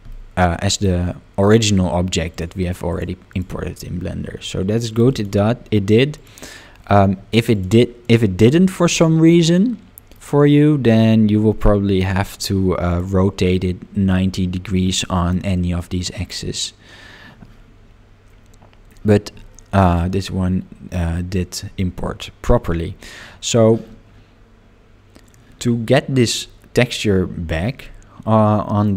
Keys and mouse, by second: 0.1 middle click, 2.9 click, 3.3 click, 4.9 click, 7.5 click, 8.1 click, 8.9-10.1 middle drag, 12.9 click, 19.5 middle click, 22.4 click, 27.8-28.8 middle drag.